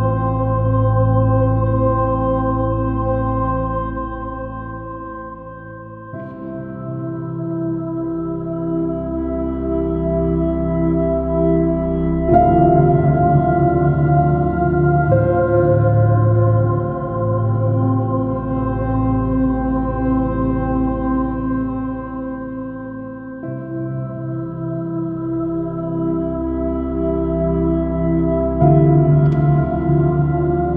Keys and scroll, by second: 2.3 space, 3.4 super+z, 4.3 super+z, 4.4 super+z, 4.9 super+z, 10.3 super+h, 10.6 super+-, 11.6 super++, 12.7 super+i, 13.0 super+space, 23.7 b, 23.9 space, 24.3 super+d, 25.6 super+z, 26.1 super+z, 26.7 super+-, 30.0 super++.